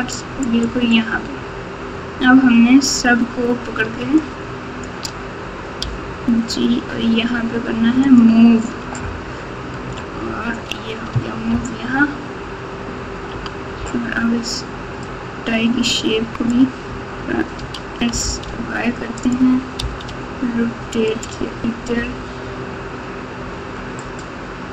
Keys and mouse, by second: 4.3 shift+click, 5.8 g, 11.5 ctrl+KP_8, 12.0 ctrl+KP_8, 12.0-13.2 ctrl+KP_8, 13.3 ctrl+KP_8, 15.1-17.5 drag, 17.5 s, 19.8 r, 21.9 g.